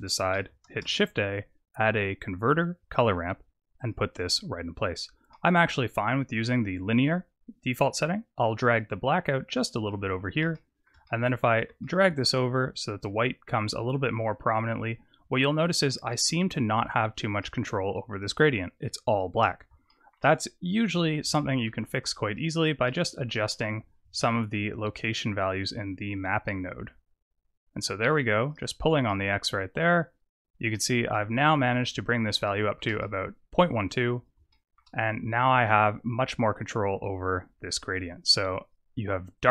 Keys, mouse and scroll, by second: 0.6 shift+a, 5.2 middle click, 8.6 click, 10.4 shift+middle click, 10.9 middle click, 11.7 shift+middle click, 13.3 click, 15.8 shift+middle click, 16.7-17.3 scroll down 4, 17.3 middle click, 17.8-18.3 scroll down 1, 18.3-18.8 scroll down 3, 18.8-19.4 scroll up 4, 19.8 shift+middle click, 20.1 shift+scroll down 1, 20.8-21.3 scroll up 2, 21.3 shift+middle click, 22.8 shift+middle click, 24.1 shift+click, 29.0 middle click, 31.8-32.3 scroll up 6, 32.3 shift+middle click, 32.9 middle click, 34.4 shift+middle click, 35.3 click, 39.3 click.